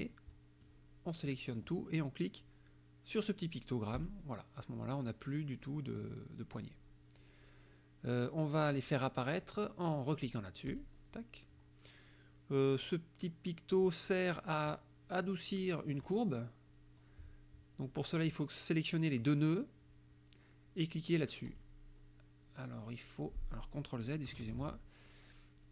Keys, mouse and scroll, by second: 0.7 click, 4.0 click, 10.8 click, 14.8-16.2 drag, 18.3 click, 21.5 click, 24.5 ctrl+z.